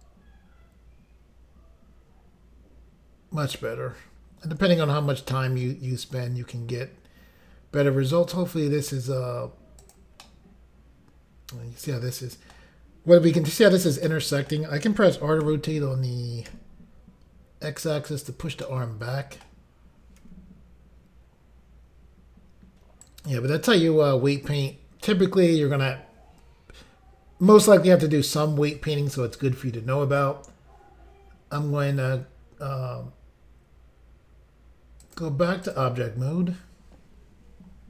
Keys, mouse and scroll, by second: 9.8 click, 10.3 middle click, 14.1 middle click, 15.2-15.5 typing, 16.5 x, 18.2 click, 18.4 click, 18.7 middle click, 20.2 r, 23.1 right click, 23.5 scroll down 2, 35.1 click, 35.2 click, 35.7 click, 35.8 click.